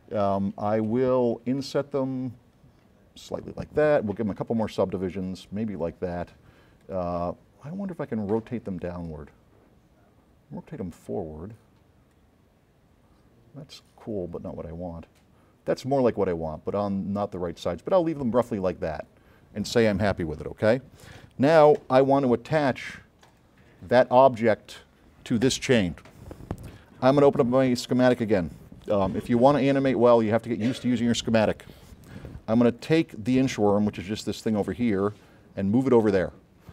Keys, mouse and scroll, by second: 1.8 click, 3.6 click, 4.7 click, 6.9 click, 9.2 click, 12.2 click, 12.4-14.8 middle drag, 19.0 click, 21.0 middle click, 22.1 s, 22.2 right click, 23.4 click, 23.9 scroll up 2, 28.4 9, 30.2 middle click, 30.3 middle click, 32.9 click, 34.2 m, 34.6-36.2 drag, 36.4 middle click, 36.4 scroll up 1.